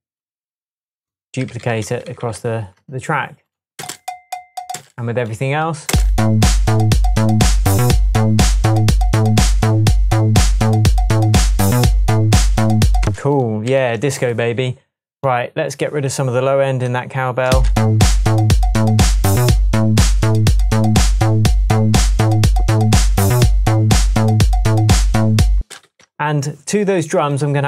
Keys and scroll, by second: 1.5 super+d, 2.2 super+d, 3.8 space, 5.9 space, 13.0 space, 13.8 super+s, 17.5 space, 25.6 space, 25.9 super+s.